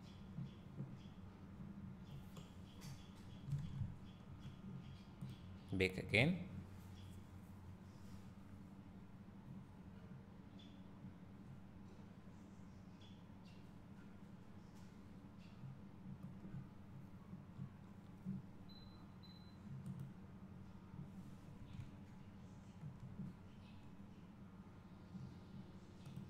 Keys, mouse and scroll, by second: 2.3 scroll down 1, 2.9-3.6 scroll up 1, 8.3-26.2 drag, 18.3 scroll down 1, 22.1 `.